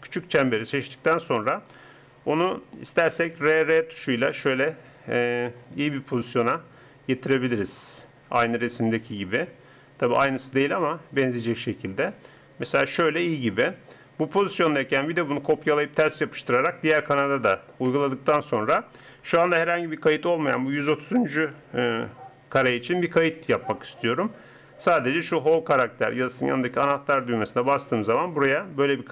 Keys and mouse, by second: 3.4 r, 15.4-18.0 drag, 27.6-29.1 drag.